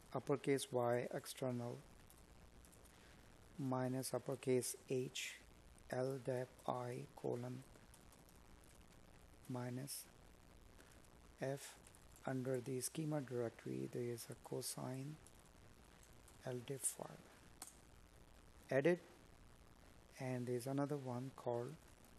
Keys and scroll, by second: 2.4 space, 4.7 space, 6.3 Tab, 10.6 Tab, 13.9 Up, 15.4 Left.